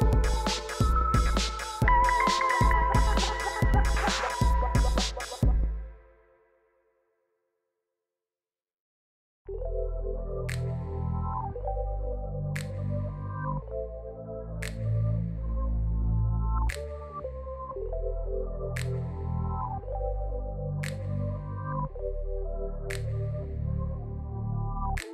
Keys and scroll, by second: 1.5 g, 1.7 z, 3.8 r, 4.7 g, 5.6 r, 6.1 g, 7.3 shift+z, 8.3 ctrl+a, 9.6 Tab, 9.9 shift+z, 10.8 shift+s, 11.1 Tab, 14.2 shift+d, 14.3 r, 15.3 shift+r, 16.5 shift+z, 18.4 ctrl+s, 20.3-21.9 typing, 21.6 Tab, 22.9 s, 23.7 Tab, 24.0 r, 24.1 z.